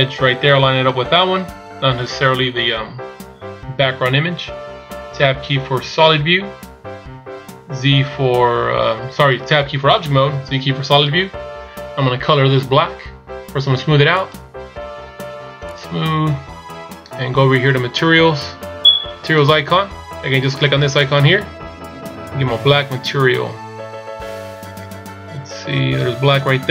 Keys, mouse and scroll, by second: 6.3 Tab, 8.4 z, 14.5 click, 15.8 click, 17.9 scroll down 2, 19.3 scroll down 2, 19.4 click.